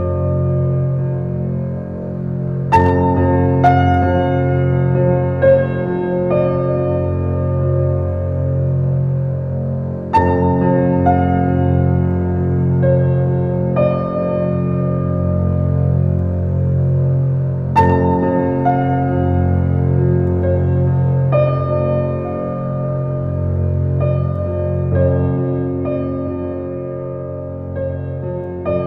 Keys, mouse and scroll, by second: 0.9-1.4 scroll down 5, 1.5-2.6 middle drag, 2.6 scroll up 3, 3.2 middle click, 3.6-3.9 scroll down 2, 4.0-9.2 middle drag, 12.7 shift+click, 16.1-21.5 middle drag, 22.9 Tab, 23.3-28.8 middle drag.